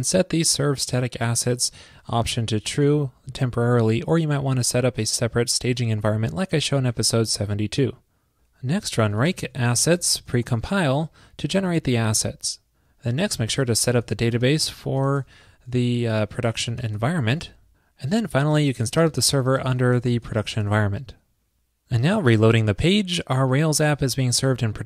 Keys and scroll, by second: 7.4 super+s.